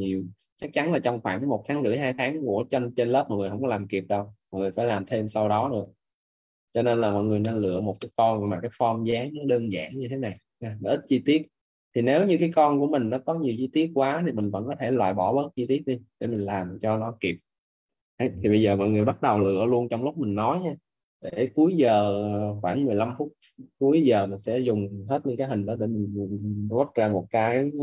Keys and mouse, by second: 20.2 middle click.